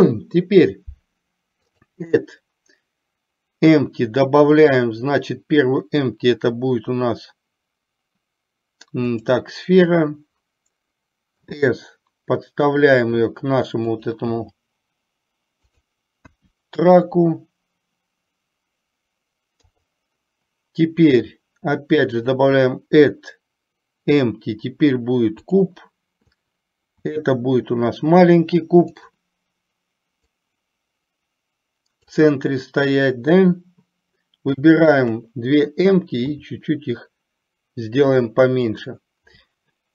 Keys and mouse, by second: 1.8-9.4 drag, 11.5 s, 14.3 g, 16.4 KP_1, 19.8 KP_3, 22.5-25.7 drag, 27.2 s, 30.4-32.3 drag, 35.2 shift+click, 36.4 s.